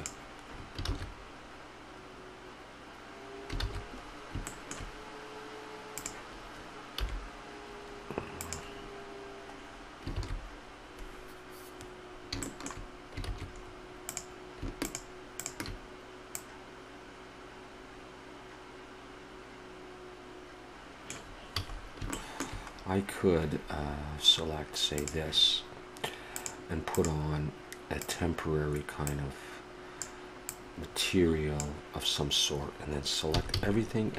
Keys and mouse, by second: 1.2 shift+z, 3.7 shift+z, 4.0-6.0 middle drag, 6.0 click, 7.2 r, 9.7 middle click, 10.4 shift+z, 13.4 shift+z, 14.1-18.3 drag, 20.7 shift+z, 21.5 a, 22.3-25.0 middle drag, 25.0-30.0 drag, 33.3 a, 33.6 a.